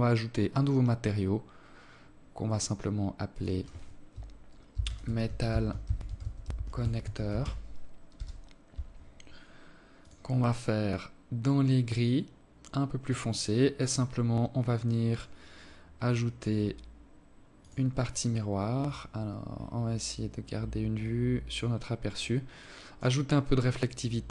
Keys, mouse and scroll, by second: 1.2 click, 2.0 click, 8.7 click, 12.3-13.8 scroll down 11, 13.8 click, 14.8 click, 15.5-16.3 scroll up 1, 16.3 click, 16.8-17.3 scroll up 3, 17.6 click, 17.9-18.2 scroll up 2, 18.6 scroll down 1, 19.7 click, 21.3 click, 22.4 click.